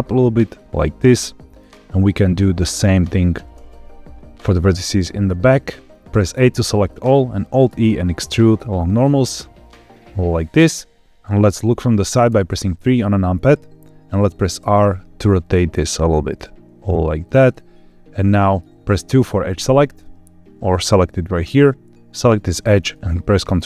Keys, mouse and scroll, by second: 0.3 click, 0.7 middle click, 2.1 click, 2.7 shift+click, 3.2 g, 3.4 g, 5.8 click, 5.9 middle click, 6.0 a, 6.8 middle click, 7.4 alt+e, 10.4 click, 12.2 KP_3, 14.5 r, 17.1 click, 17.4-18.5 middle drag, 19.1 2, 22.0 click, 22.4 middle click.